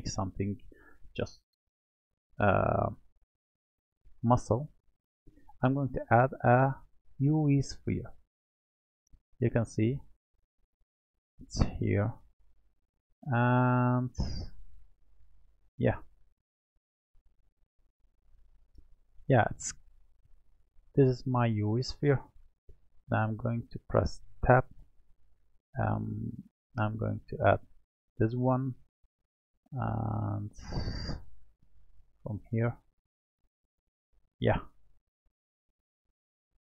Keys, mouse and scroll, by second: 5.0-8.1 drag, 8.6-9.0 scroll down 1, 9.0-11.2 middle drag, 11.2 click, 12.6-14.6 middle drag, 14.6-16.3 scroll up 3, 16.3 click, 17.8-22.1 shift+middle drag, 24.2 Tab, 26.8 w, 27.9-28.9 drag, 28.9-31.9 middle drag, 32.5 click, 33.8 click, 35.1-35.9 scroll up 4, 35.9 shift+middle click.